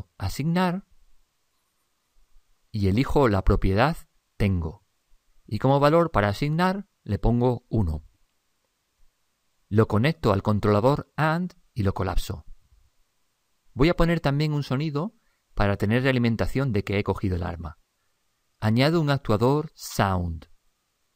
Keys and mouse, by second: 6.3 click, 10.6-13.9 drag, 18.9 click.